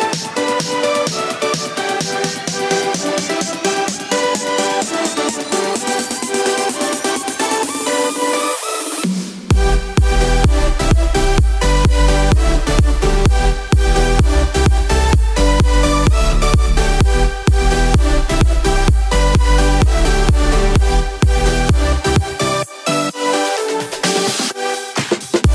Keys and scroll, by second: 3.8 ctrl+z, 8.0 ctrl+z, 22.6 ctrl+z.